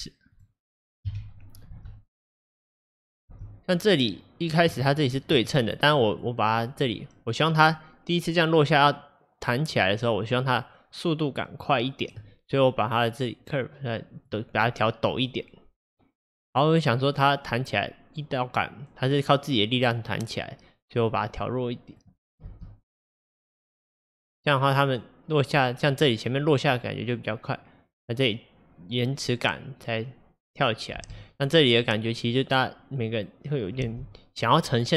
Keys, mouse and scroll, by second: 1.1 KP_1, 1.8 space, 3.4 space, 4.2 click, 4.9 shift+click, 6.0-11.2 drag, 13.1 click, 15.9-17.5 drag, 22.5 space, 31.1 space, 31.6-33.9 drag, 33.9 space.